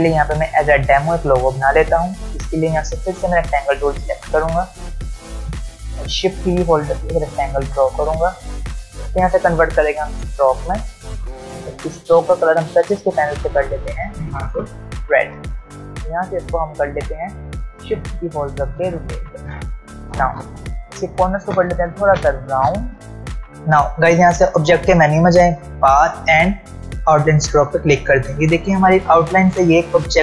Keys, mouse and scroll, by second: 3.4 ctrl+alt+scroll up 1, 5.0 ctrl+alt+scroll down 1, 6.4-7.6 shift+click, 14.0 ctrl+alt+scroll up 1, 15.6 ctrl+alt+scroll down 1, 15.8 v, 17.0-19.2 drag, 21.0-22.3 click, 23.1 ctrl+alt+scroll down 1, 24.6 click.